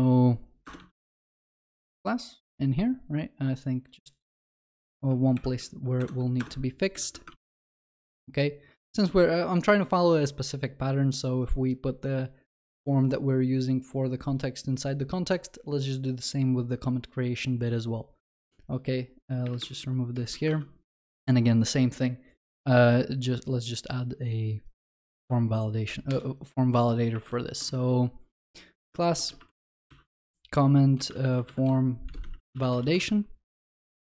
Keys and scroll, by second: 0.8 ctrl+v, 1.1 ctrl+s, 5.4 alt+shift+F2, 6.0 alt+Return, 19.4 ctrl+BackSpace, 25.1 ctrl+c, 27.2 alt+Insert.